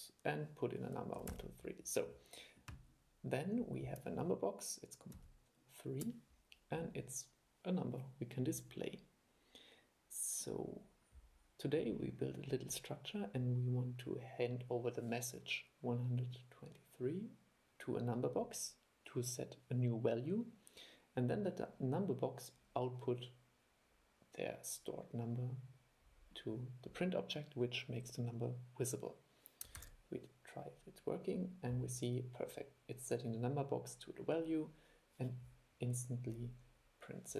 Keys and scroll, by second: 5.3 super+3, 29.9 super+e.